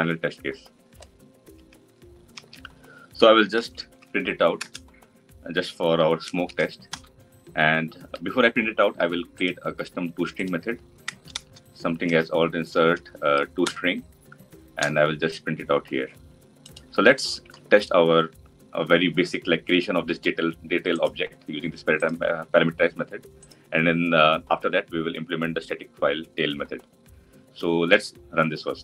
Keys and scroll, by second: 4.5 Return, 12.0 alt+Insert, 17.2 ctrl+y.